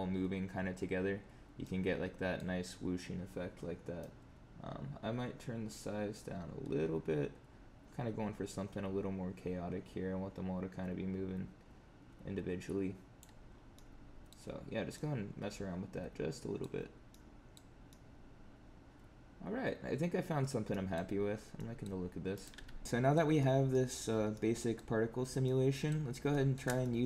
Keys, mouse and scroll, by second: 1.5 middle click, 3.9 click, 13.5 scroll up 4, 13.7 middle click, 14.7 scroll down 2, 14.9 middle click, 16.8 scroll up 2, 17.0 middle click, 17.8 middle click, 18.1 middle click, 18.1 scroll up 1, 20.6 middle click, 20.9 scroll up 1, 21.2 scroll down 4, 21.5 middle click, 22.3 click, 22.8 g, 22.8 middle click, 22.8 space, 23.3 middle click, 24.0 scroll up 4, 24.3 middle click, 25.2 scroll down 1, 25.4 middle click, 26.2 shift+middle click, 26.7 middle click.